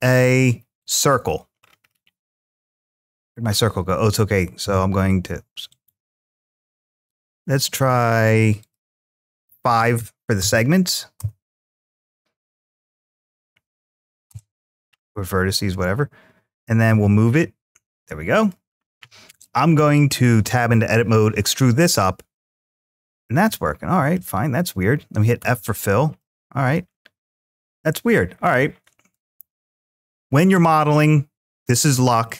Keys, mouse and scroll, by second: 1.4-2.4 scroll down 4, 2.9-3.3 scroll down 3, 4.2 scroll up 3, 4.4 g, 5.5 right click, 6.8 click, 8.4-11.0 drag, 12.6-14.1 drag, 18.2 click, 20.2 Tab, 20.8 e, 22.7 shift+click, 23.2 middle click, 25.2 f, 26.0 middle click, 27.5 middle click, 29.7 middle click, 32.0 middle click.